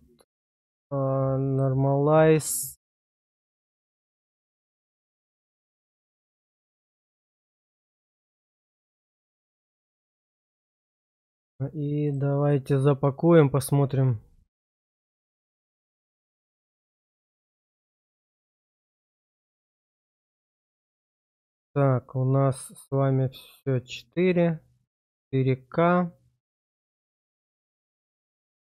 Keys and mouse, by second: 1.5 click, 3.2 click, 12.0-13.9 drag, 21.3 click, 28.2-28.6 drag.